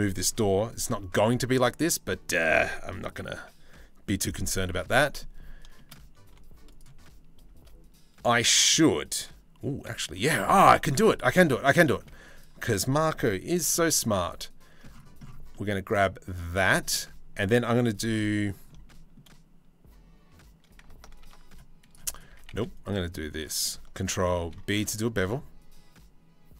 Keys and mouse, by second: 0.5 c, 2.8 ctrl+l, 4.1 h, 4.6 middle click, 5.8 3, 9.3 c, 10.7 alt+click, 11.0 middle click, 11.6 click, 11.7 z, 13.1 c, 16.3 click, 18.3 shift+middle click, 20.8 ctrl+r, 21.9 s, 24.0 ctrl+b.